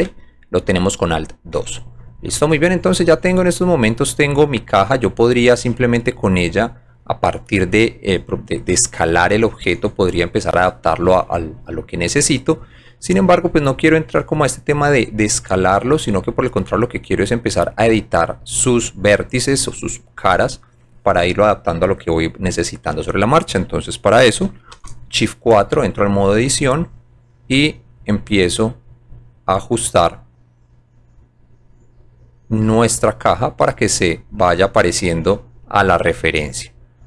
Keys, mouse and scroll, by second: 0.1 alt+2, 1.6 alt+4, 2.8 middle click, 3.0 middle click, 5.4 click, 12.1 click, 13.3 click, 14.4-15.6 drag, 16.7-17.9 drag, 18.7 scroll up 1, 19.5 scroll up 1, 25.6 shift+click, 27.3 click, 28.8 click, 30.0 click, 31.7 click, 33.0-33.6 drag, 33.9 click, 34.9 click, 36.3 click.